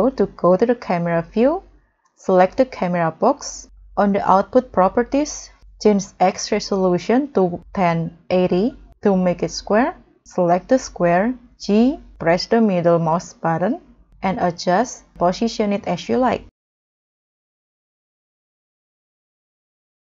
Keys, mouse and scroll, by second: 0.4-0.9 scroll up 6, 7.2-8.3 typing, 8.3 Return, 9.2 scroll down 2, 11.7 g, 12.3 middle click, 12.4 middle click, 16.5 m, 16.5 g, 18.4 g, 18.4 scroll down 3, 18.9-19.8 scroll up 2, 19.8 g.